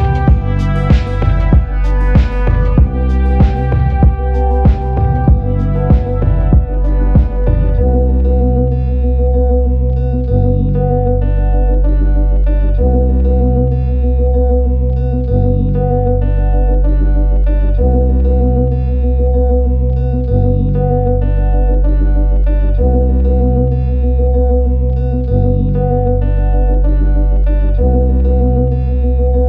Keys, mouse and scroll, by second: 0.0-5.7 typing, 7.1 click, 7.4 click, 9.7 click, 11.5 click, 13.3-14.4 typing, 14.9 click, 19.0 typing, 19.7 click, 21.9 click, 24.4 click, 26.8 click, 28.5 click, 29.3 click.